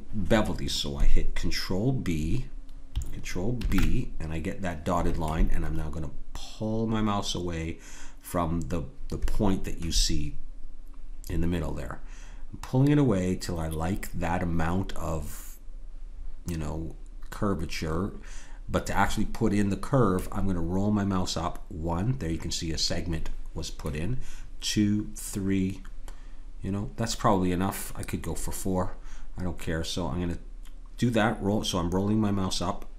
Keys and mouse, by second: 3.5 ctrl+b.